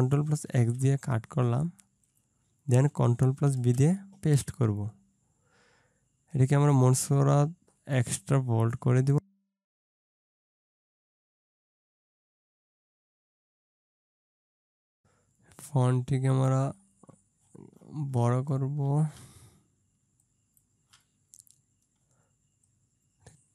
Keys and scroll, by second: 0.5 ctrl+x, 3.6 ctrl+v, 11.4 space, 13.1 ctrl+z.